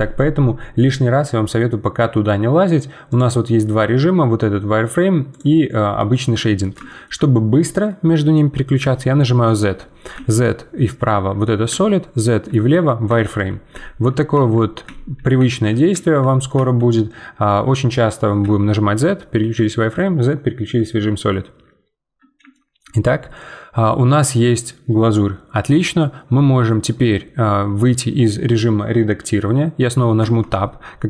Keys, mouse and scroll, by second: 3.1-4.6 drag, 5.3-6.3 drag, 6.3-7.4 middle drag, 7.4-8.1 scroll down 1, 8.1 middle click, 8.8 z, 10.2-14.6 z, 16.5 z, 19.5 z, 22.5-26.0 shift+middle drag, 30.2 Tab.